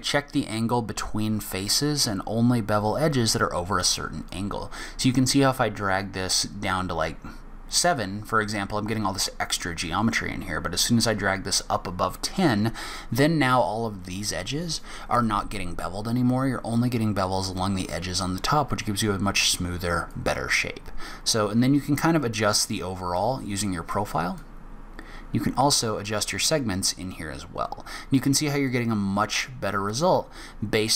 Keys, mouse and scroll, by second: 4.2 click, 20.1 click, 24.3 click.